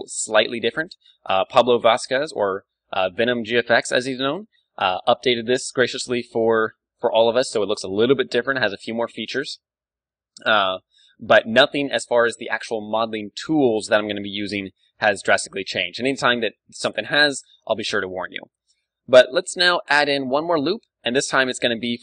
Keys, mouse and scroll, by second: 5.7 a, 6.6 n, 7.1-11.0 middle drag, 9.8 ctrl+w, 14.6-20.2 middle drag, 19.9 ctrl+r, 21.5-22.0 drag.